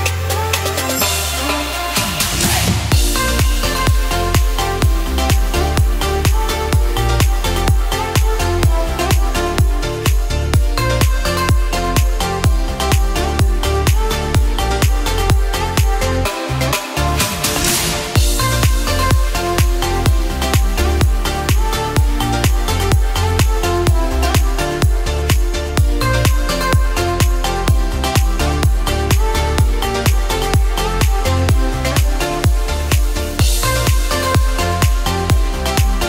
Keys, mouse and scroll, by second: 3.4 alt+click, 4.1 ctrl+b, 9.6-10.6 scroll down 1, 10.6 click, 10.6-11.0 scroll down 2, 11.0 click, 11.3 click, 11.7 click, 12.1 click, 12.6 click, 14.1 click, 15.0 click, 15.8 alt+click, 16.7 ctrl+b, 22.1 click, 22.8 alt+click, 23.6 s, 26.1 click, 26.6 alt+click, 27.1 s, 30.9 alt+click, 31.4 s, 34.1-35.0 scroll down 2, 35.0 click, 35.0-35.5 scroll down 7.